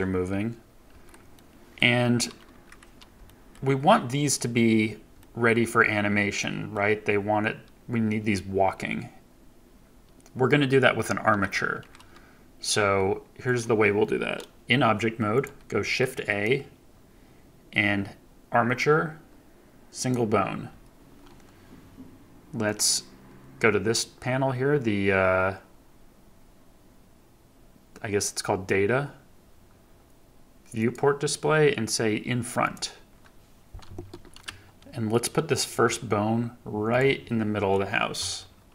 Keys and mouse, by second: 0.8 Escape, 1.3-1.7 middle drag, 3.2 middle drag, 5.1 click, 6.3-6.7 drag, 12.7 KP_3, 13.4 click, 15.8 shift+a, 22.6 click, 30.8 click, 32.6 click, 35.6 g, 36.8-38.7 drag.